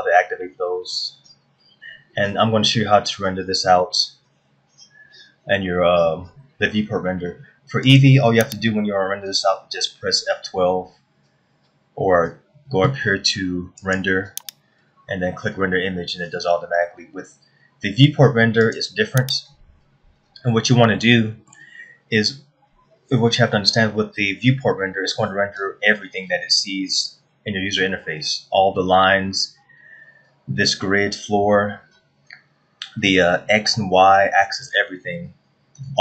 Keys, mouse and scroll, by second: 1.7 scroll down 1, 8.5 click, 14.4 click, 19.2 click, 21.6 shift+middle click, 25.7-26.5 scroll up 1, 35.2-35.6 scroll down 2.